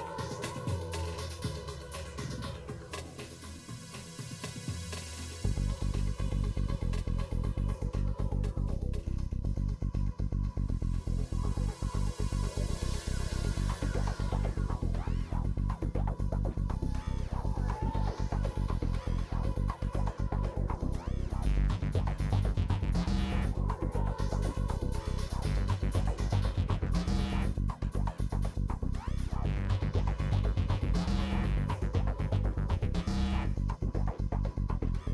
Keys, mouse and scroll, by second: 0.0 shift+click, 0.1 middle click, 0.4 KP_1, 0.5 KP_2, 1.2 click, 2.0 scroll up 1, 2.1 shift+middle click, 2.6 s, 4.9 s, 6.1-7.3 shift+middle drag, 7.3 click, 8.4 s, 9.6 click, 10.1 middle click, 10.3 scroll down 1, 10.4 middle click, 11.1-11.5 scroll up 6, 11.5 click, 11.6 shift+middle click, 12.4 click, 12.9 Delete, 14.2 click, 14.5 Delete, 15.0 click, 15.1 Delete, 15.6 shift+middle click, 15.8 click, 16.1 Delete, 16.5 click, 16.7 Delete, 17.1-18.2 shift+middle drag, 18.2 click, 18.5 Delete, 18.7 click, 18.8 Delete, 19.1 middle click, 19.3-19.8 scroll down 5, 19.4 middle click, 19.8 middle click, 21.5 ctrl+s, 21.7 shift+middle click, 21.9 scroll up 2, 22.0 shift+middle click, 22.3 click, 23.3 right click, 23.7 click, 24.4 right click, 24.8 click, 25.4 right click, 25.8 click, 26.4 shift+middle click, 27.0 right click, 27.3-28.3 drag, 29.1 shift+click, 29.3 right click, 29.9 click, 30.1 middle click, 30.9 scroll down 1, 31.1 middle click, 31.8 middle click, 32.2 ctrl+r, 33.7 click, 33.8 middle click, 34.1 ctrl+r.